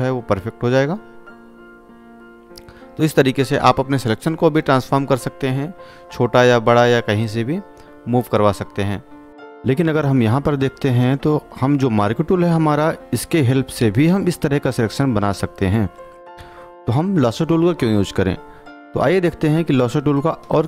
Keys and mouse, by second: 4.0 space, 4.3 click, 4.5 space, 5.0 click, 6.4 click, 8.7 click, 8.7 space.